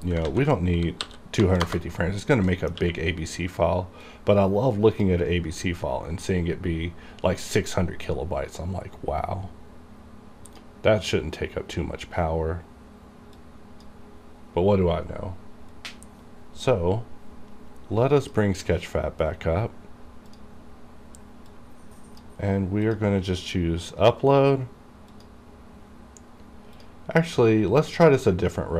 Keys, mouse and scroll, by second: 0.4 ctrl+a, 1.2 KP_4, 1.5 KP_0, 1.8 KP_Enter, 2.6 middle click, 2.9 q, 4.2-7.6 drag, 10.6 click, 13.5-15.8 drag, 15.8-17.8 scroll down 1, 18.4 click, 20.7-23.0 drag, 25.3 click, 26.9 click.